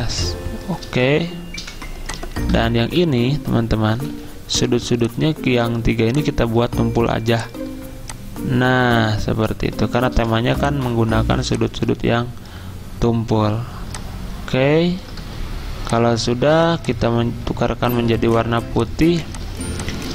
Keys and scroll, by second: 0.5-1.6 typing, 3.7 v, 4.1 a, 10.1 v, 18.0 x, 19.2 z.